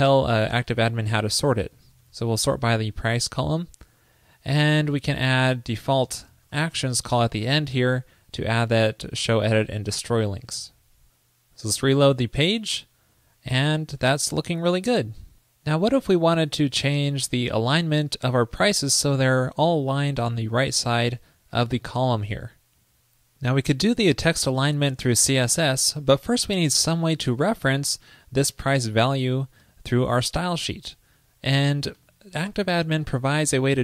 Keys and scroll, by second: 10.5 super+s, 11.9 super+r.